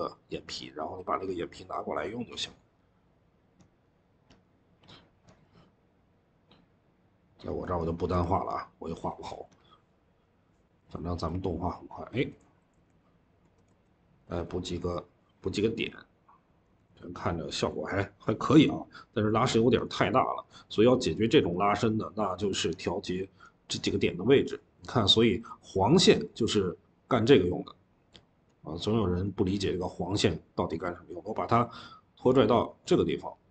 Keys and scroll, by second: 8.0 Escape, 13.7-14.5 typing, 16.5-17.7 typing.